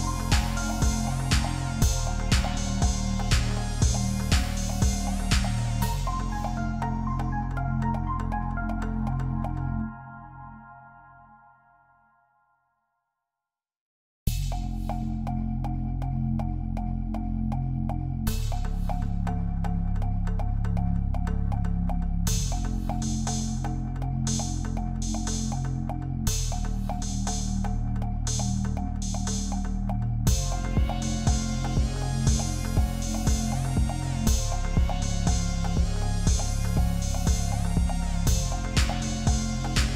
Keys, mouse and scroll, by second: 0.4 double click, 3.5 shift+click, 4.0 ctrl+z, 5.5 alt+scroll up 1, 5.9 space, 6.3 alt+scroll up 1, 9.0 double click, 12.2 ctrl+t, 13.5 ctrl+t, 16.8 Return, 17.6 alt+scroll down 1, 19.8 typing, 21.1 typing, 23.3 ctrl+click, 26.9 typing, 32.0 alt+scroll up 1, 32.5 space, 33.9 F10, 34.0 right click, 35.6 typing, 38.7 typing, 39.7 shift+click.